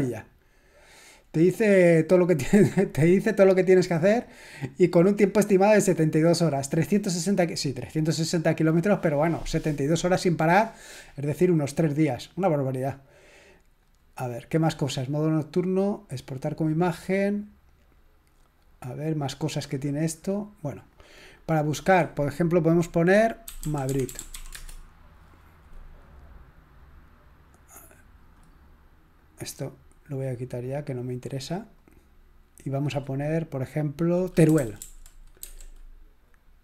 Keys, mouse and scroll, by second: 13.8 click, 18.6-20.1 drag, 20.9 click, 23.3-24.9 typing, 27.7-29.9 drag, 31.1-33.0 drag, 34.3-35.4 typing.